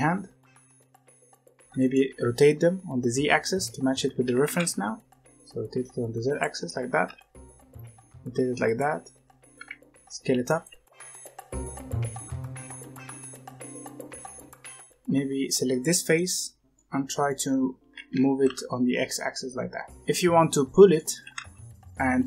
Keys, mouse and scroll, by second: 2.6-4.1 scroll up 1, 4.1 r, 6.9 r, 9.5 s, 10.6 g, 11.1-11.6 middle drag, 11.6 s, 12.1-12.4 middle drag, 12.4 s, 12.8 s, 12.9-14.2 middle drag, 14.2 scroll up 1, 14.4 Tab, 14.7 3, 15.6 click, 16.1-17.8 middle drag, 17.8 g, 19.9-21.1 middle drag, 21.1 g.